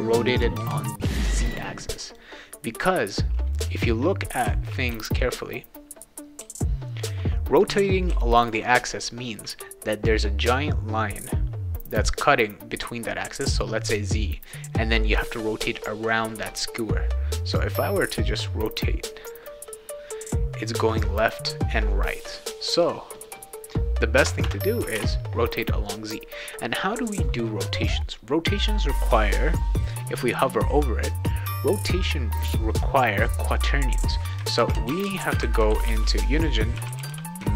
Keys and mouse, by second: 2.1 click, 3.1 right click, 3.6 d, 4.1-9.0 right drag, 4.4 d, 4.9 q, 6.4 w, 7.0 d, 7.7 w, 8.1 e, 18.3-22.4 drag, 23.1 click, 23.3 click, 24.9 alt+Tab, 34.3-37.5 typing.